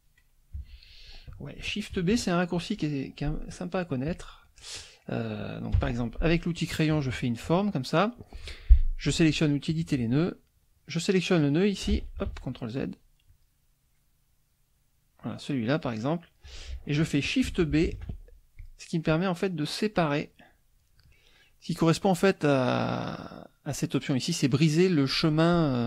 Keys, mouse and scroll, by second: 0.6 F1, 1.0 click, 2.1 KP_Subtract, 2.7-4.3 drag, 4.3 middle click, 4.6 click, 5.8 F6, 6.6-7.7 drag, 9.8 click, 10.9 click, 12.3 ctrl+z, 13.3 click, 13.6-15.2 middle drag, 15.2-16.5 drag, 17.9 shift+b, 18.6 shift+click, 19.1-20.2 drag.